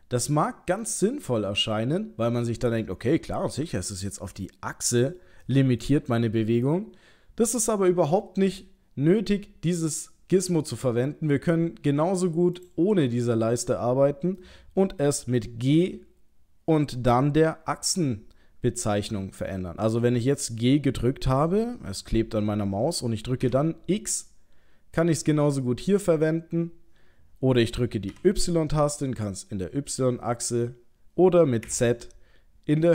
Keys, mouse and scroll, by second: 0.3 middle click, 1.5 middle click, 4.0 click, 5.5 middle click, 6.7 click, 10.7 click, 12.6 click, 14.4 middle click, 15.8 g.